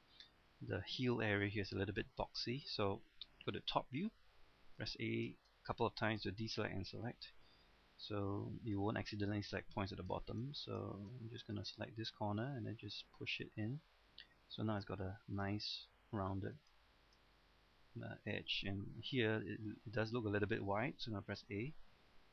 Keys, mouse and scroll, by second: 0.1-1.0 scroll up 2, 1.0 middle click, 1.7 scroll up 1, 2.0 middle click, 3.6 KP_7, 4.8 a, 5.3 a, 7.5 a, 7.9 b, 8.2 click, 9.1-9.9 scroll down 1, 10.2 shift+middle click, 10.6 scroll up 1, 10.8 shift+middle click, 11.2-11.6 scroll up 1, 12.5-14.9 drag, 15.1 shift+middle click, 15.5-16.3 scroll down 1, 16.8 shift+middle click, 17.3-17.7 scroll up 1, 17.7-18.7 scroll down 1, 21.3 a.